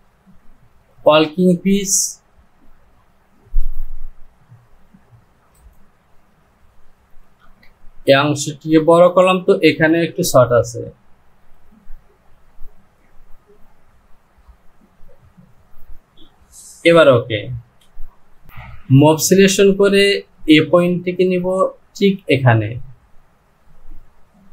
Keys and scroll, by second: 7.5 Return, 17.6 Home.